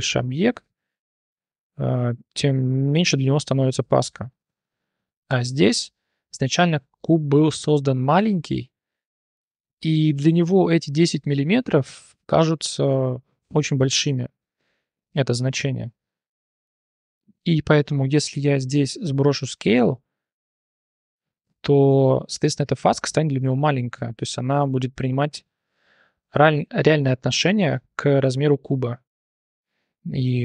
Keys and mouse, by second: 5.2 click, 5.6 shift+drag, 6.6 shift+drag, 13.7-14.0 shift+drag, 15.0 click, 15.4 click, 15.8 click, 17.7 shift+drag, 18.3 ctrl+a, 19.7-21.4 drag, 29.3 shift+drag.